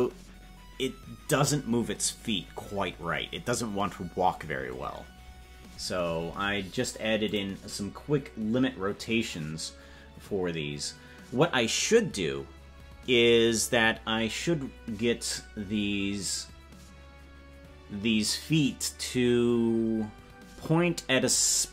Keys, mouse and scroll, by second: 7.3 click.